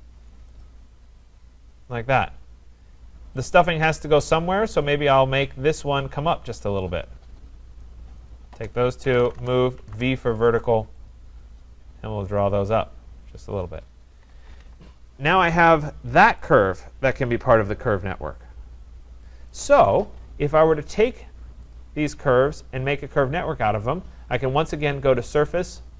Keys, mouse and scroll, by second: 0.0-0.1 typing, 0.6 click, 1.7 click, 2.1-2.9 scroll, 3.5 click, 4.1 click, 4.8 click, 5.4 click, 6.9 click, 8.3 shift+click, 8.8-10.4 typing, 11.1 click, 12.7 click, 13.3-13.6 scroll, 13.5-14.2 typing, 14.3 Escape, 14.6 Escape, 16.0 click, 19.5 right click, 21.7 click, 22.5 click, 24.5 click.